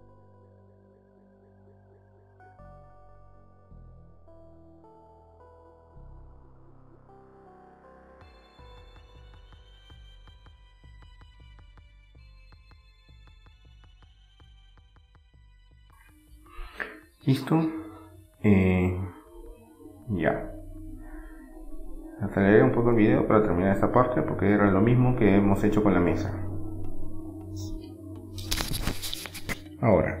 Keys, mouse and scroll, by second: 0.2-2.5 typing, 3.4 middle click, 4.5 middle click, 4.7 ctrl+r, 5.4-6.6 drag, 6.2 right click, 6.9 right click, 7.5 click, 8.0 middle click, 8.2-10.0 right drag, 9.4-11.0 drag, 11.0 middle click, 11.4-15.2 middle drag, 16.0 Tab, 16.2-18.5 middle drag, 18.9 middle click, 21.5-22.7 middle drag, 22.3 Tab, 23.0 middle click, 25.4-26.9 middle drag, 27.2-28.9 right drag, 28.9 click, 29.3-30.2 middle drag.